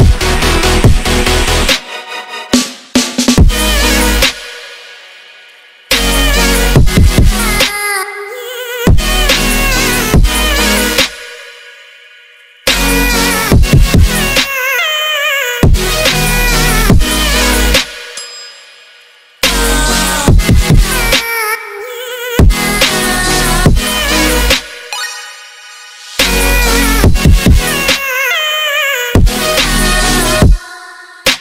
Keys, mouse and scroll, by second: 0.3 shift+click, 0.6 shift+drag, 0.9 shift+click, 1.1-1.7 middle drag, 1.7 s, 2.6-3.3 middle drag, 3.3 click, 4.1-5.5 ctrl+middle drag, 5.5 click, 6.9 ctrl+s, 7.2-7.8 middle drag, 7.8 click, 8.3-9.5 ctrl+middle drag, 9.6-10.0 ctrl+middle drag, 10.0 drag, 10.1 middle click, 10.5-10.9 middle drag, 10.9 shift+click, 11.5 click, 13.3 click, 16.1 click, 18.1 click, 18.7 click, 18.9 ctrl+middle click, 19.3 click, 19.7-20.3 middle drag, 21.1-21.8 ctrl+middle drag, 22.1-23.1 ctrl+middle drag, 23.1 click, 23.5 click, 23.9-25.2 middle drag, 25.3 click, 25.5-27.3 ctrl+middle drag, 27.3 click, 28.4 click, 28.5-28.9 ctrl+middle drag, 28.9 ctrl+z, 29.0 middle click, 29.2 click, 29.3-29.8 middle drag, 29.8 click, 30.4-31.4 middle drag.